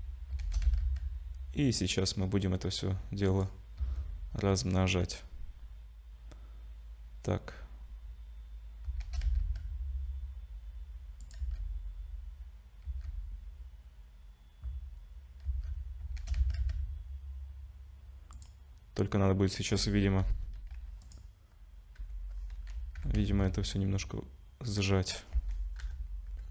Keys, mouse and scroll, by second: 0.4 shift+d, 3.8 z, 5.0-6.8 scroll up 1, 9.0 shift+d, 11.4 z, 12.9 z, 16.2 shift+d, 19.6 click, 20.2 l, 21.0 click, 22.0 l, 23.0 g, 25.8-26.5 typing.